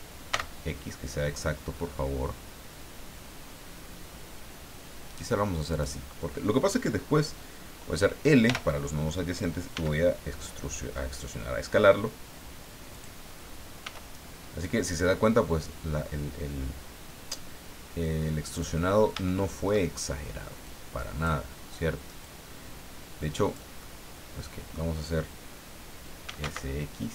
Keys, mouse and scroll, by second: 0.3 x, 5.7 click, 8.4 l, 9.7 s, 12.9 click, 13.8 s, 18.5 click, 18.9-19.2 scroll up 1, 19.2 shift+middle click, 20.6 click, 22.2-23.7 drag, 23.8-24.9 middle drag, 26.0-26.9 typing.